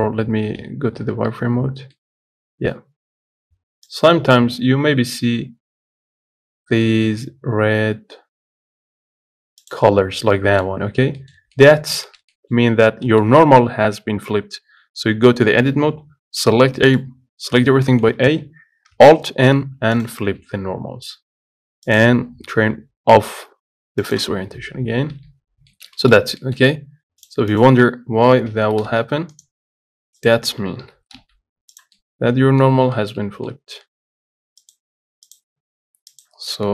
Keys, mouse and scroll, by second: 1.4 z, 2.2-9.9 middle drag, 9.9 click, 10.6-12.0 middle drag, 12.0-12.3 scroll up 3, 12.3-14.6 shift+middle drag, 14.6 Tab, 17.0-18.2 middle drag, 18.2 a, 20.3 alt+n, 20.6 Tab, 20.9 scroll down 1, 24.3 click, 24.7-25.5 scroll down 3, 25.5 z, 25.7 scroll up 2, 25.9 shift+middle click, 26.4-27.0 scroll up 4, 26.6 shift+middle click, 27.5 click, 27.9 click, 28.7 g, 30.4 click, 31.1 g, 32.2 middle click, 32.9-33.2 scroll up 2, 33.2-36.4 shift+middle drag, 36.4 click.